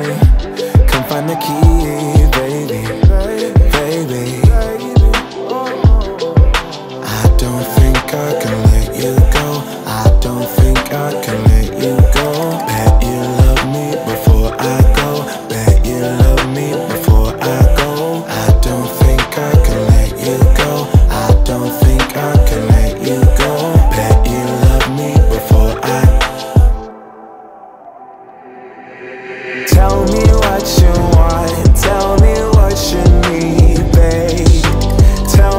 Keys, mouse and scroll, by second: 0.0 click, 0.5 space, 2.7 click, 7.3 c, 8.6-12.6 drag, 15.0 ctrl+v, 16.2 click, 18.5 ctrl+v, 19.9 click, 22.6 u, 23.9 scroll down 1, 25.3 click, 27.6 click, 28.0 scroll up 1, 29.1-34.1 shift+drag.